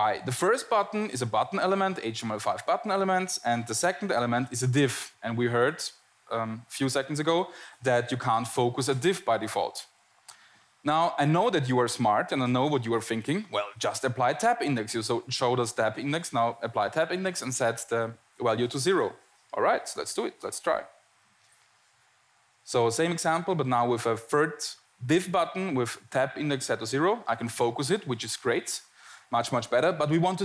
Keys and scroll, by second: 24.2 Tab, 25.6 Tab.